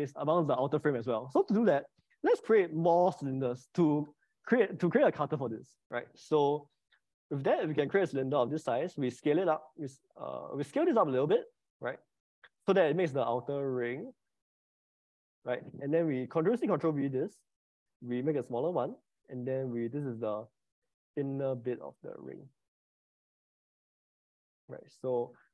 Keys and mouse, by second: 7.7 click, 8.4 s, 9.6 click, 10.5 click, 11.3 s, 11.5 s, 16.3 click, 16.7 ctrl+c, 17.1 ctrl+v, 18.7 s, 25.1 click.